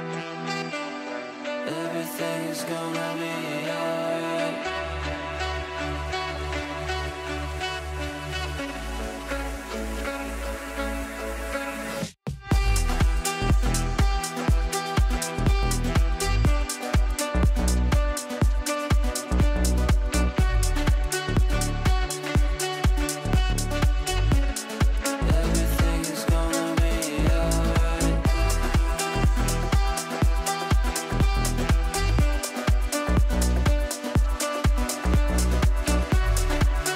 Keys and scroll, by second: 24.3 Down, 25.2 f.